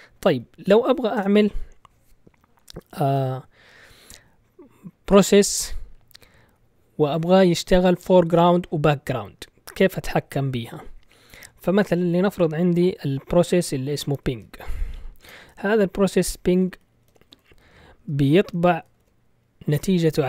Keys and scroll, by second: 0.0-0.8 typing, 1.1 Return, 3.0 ctrl+l, 14.1-15.2 typing, 16.3-19.4 typing, 19.7 Return.